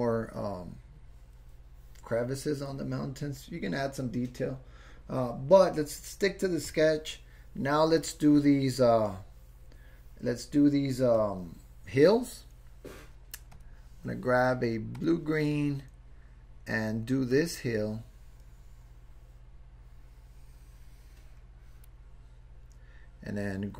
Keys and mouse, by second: 6.7 click, 11.2 click, 17.3-21.9 drag.